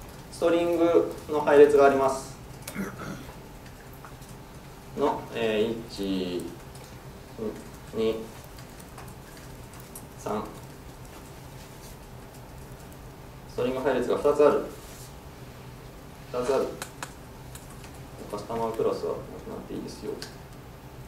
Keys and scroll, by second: 12.9 super+c.